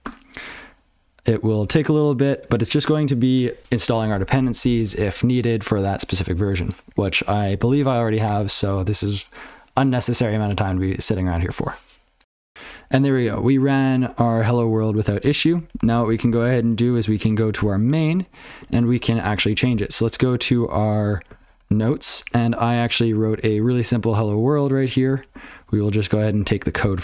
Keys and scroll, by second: 21.3 alt+x.